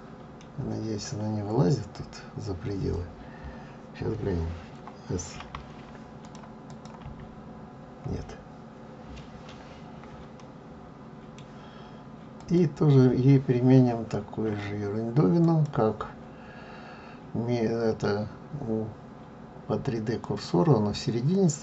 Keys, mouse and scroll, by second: 0.5 scroll down 1, 6.2 click, 6.7 click, 10.3 middle click, 14.4 l.